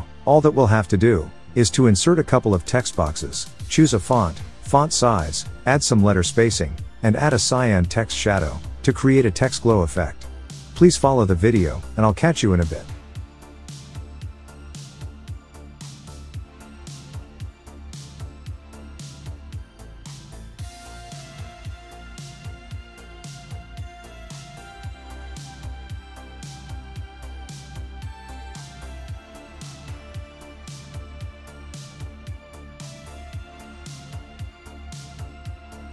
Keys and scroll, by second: 16.0-17.0 typing, 17.4 super+Caps_Lock, 17.4 super+a, 19.1-21.6 typing, 32.9 Left.